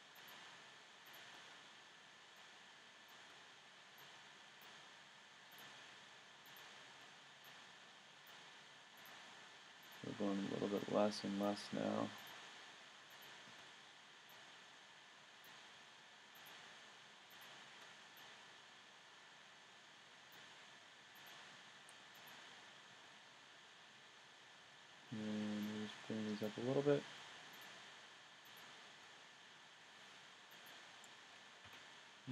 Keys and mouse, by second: 0.2-1.6 drag, 4.0 middle click, 4.2 click, 5.3 click, 5.5 right click, 5.7-6.7 middle drag, 6.7-9.0 drag, 7.5-8.6 right drag, 9.3-10.8 middle drag, 10.8-12.2 drag, 10.8 right click, 12.7-14.3 drag, 15.2 click, 18.1-19.3 middle drag, 20.0-21.2 middle drag, 23.3 click, 25.6-27.0 drag, 30.7 click, 31.7 a, 31.8 click, 32.2 middle click.